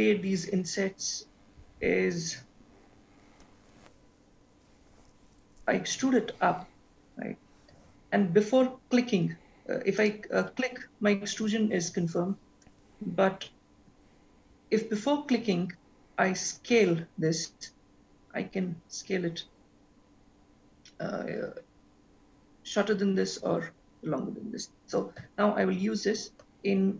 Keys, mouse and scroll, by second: 5.9 e, 12.6 ctrl+z, 14.0 e.